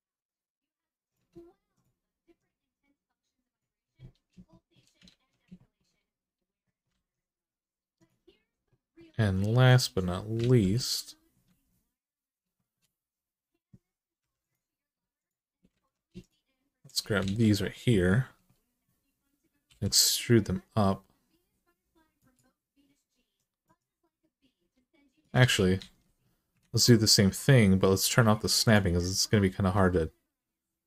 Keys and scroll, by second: 3.5 g, 4.9 alt+z, 6.7 alt+z, 10.2 alt+z, 11.2 alt+z, 14.0 3, 15.5 alt+z, 17.0 alt+z, 19.5 e, 25.2 ctrl+z, 25.6 ctrl+z, 26.4 ctrl+z, 29.5 e.